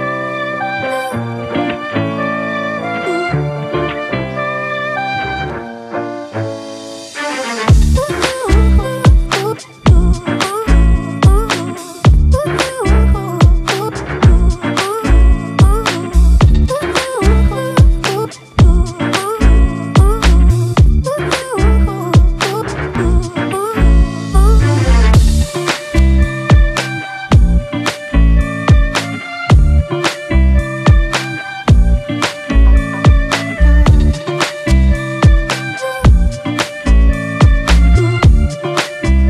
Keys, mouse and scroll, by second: 27.1 typing, 29.1-30.5 typing, 29.7 double click, 30.3 double click, 30.8 double click.